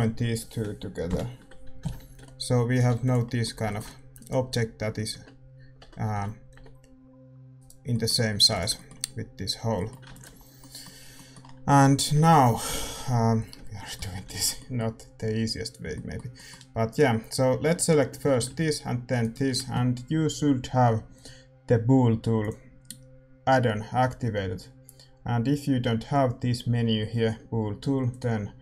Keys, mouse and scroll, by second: 1.0 ctrl+j, 1.7 a, 2.7 ctrl+s, 2.7-5.1 drag, 3.2 ctrl+s, 4.1-5.7 middle drag, 4.1-6.5 right drag, 5.1 Tab, 5.7 Tab, 6.5 g, 7.8-19.2 middle drag, 8.3 a, 8.7 ctrl+s, 8.7-10.3 drag, 10.3 ctrl+s, 12.6 ctrl+s, 16.8-28.6 right drag.